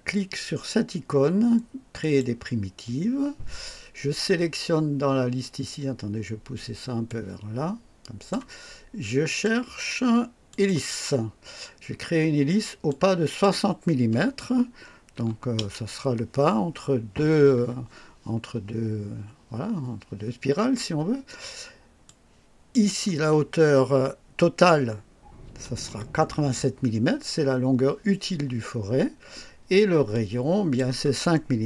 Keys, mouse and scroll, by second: 1.9 click, 7.0-8.4 drag, 9.2 click, 10.4 click, 12.8 click, 15.1 KP_6, 15.5 KP_0, 22.0 click, 25.4 KP_8, 25.8 KP_7, 30.1 click.